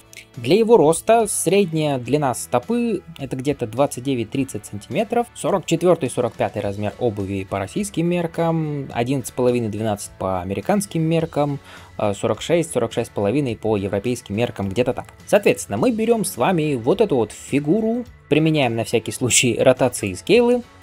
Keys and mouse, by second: 15.2 click, 15.2 middle click, 15.2 right click, 18.2 ctrl+a, 19.5-20.8 right drag.